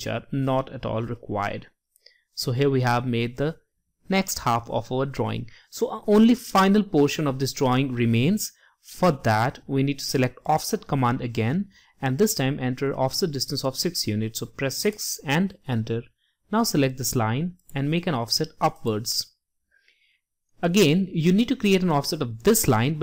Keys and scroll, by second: 12.3 6.